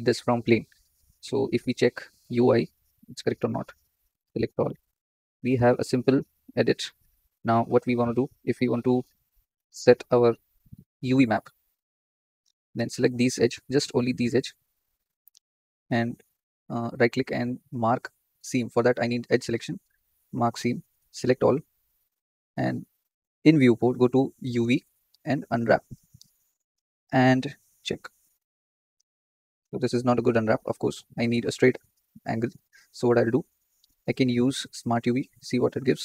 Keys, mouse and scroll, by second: 3.5 Tab, 4.1 a, 4.8-6.3 scroll up 3, 8.6 middle click, 9.1-9.8 scroll up 5, 9.8-10.9 shift+middle drag, 10.9 click, 11.7 z, 12.1 z, 13.0 alt+shift+click, 19.0 2, 19.3-21.1 right drag, 21.1 a, 25.7-36.0 drag.